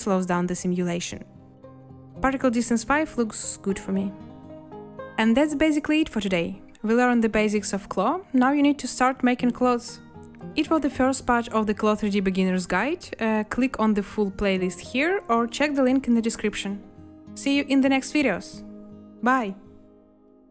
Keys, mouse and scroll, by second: 15.8 space.